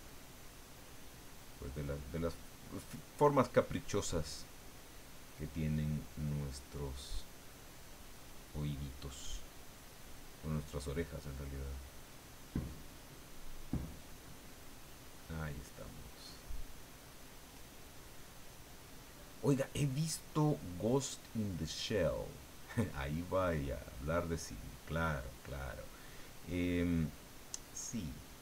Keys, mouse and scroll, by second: 0.5 click, 1.0-5.2 drag, 5.3-9.4 drag, 9.5 click, 10.6 click, 10.6 middle click, 11.5-16.9 drag, 17.0-18.9 drag, 19.1-21.9 drag, 22.7-27.0 middle drag, 27.3-28.4 drag.